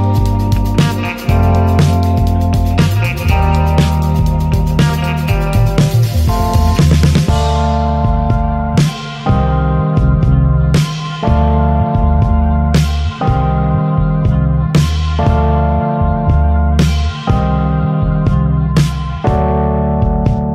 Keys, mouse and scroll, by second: 0.0 n, 0.2-0.5 scroll down 2, 0.5 shift+middle click, 1.0-1.4 scroll up 1, 1.4 ctrl+s, 1.4 shift+middle click, 2.2 ctrl+s, 2.3 ctrl+middle click, 2.6 ctrl+s, 2.8-4.1 shift+middle drag, 4.1 ctrl+s, 4.2 click, 4.5 n, 5.3 ctrl+s, 5.5 t, 5.7 t, 6.1 t, 7.1 ctrl+s, 8.0-9.3 drag, 9.3-11.0 shift+middle drag, 9.9 ctrl+s, 11.0 ctrl+s, 12.0 ctrl+z, 13.1-18.0 ctrl+middle drag, 18.0 ctrl+s, 18.2-20.5 ctrl+middle drag, 18.8 ctrl+s, 19.9 ctrl+s.